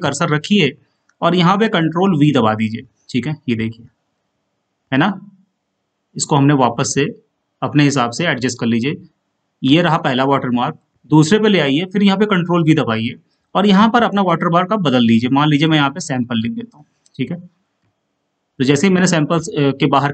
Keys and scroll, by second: 3.0 ctrl+v.